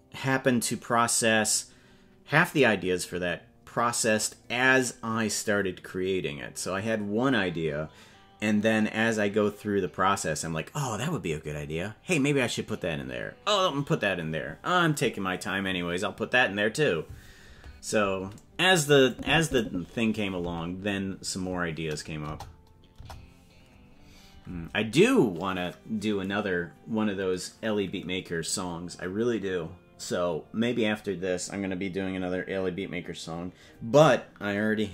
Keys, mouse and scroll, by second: 19.1 click, 22.2 KP_0, 22.9 KP_0, 23.6-24.5 scroll up 8, 24.7-25.1 scroll down 1.